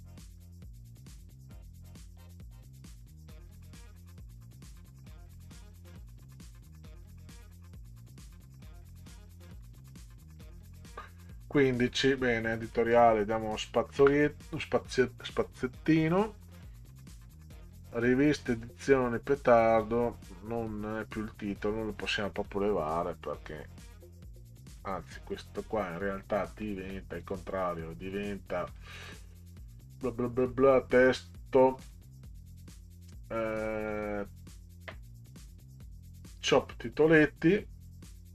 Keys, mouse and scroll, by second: 1.8 click, 3.0 5, 3.5 Delete, 5.1 click, 6.5 5, 7.5 Delete, 8.2 click, 9.5 5, 10.3 Delete, 12.6 click, 14.0 Return, 15.4 scroll up 2, 16.5 scroll up 2, 21.4-24.8 drag, 28.7 click, 30.4 click, 31.8 click, 33.9 click, 37.1 click.